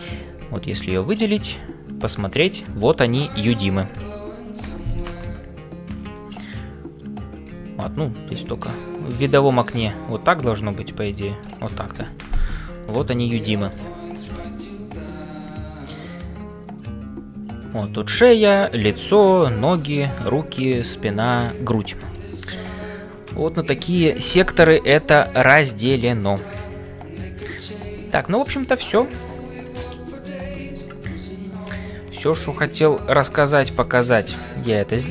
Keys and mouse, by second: 13.4-29.9 drag, 30.5 shift+F5, 32.2 middle click, 33.7 Tab.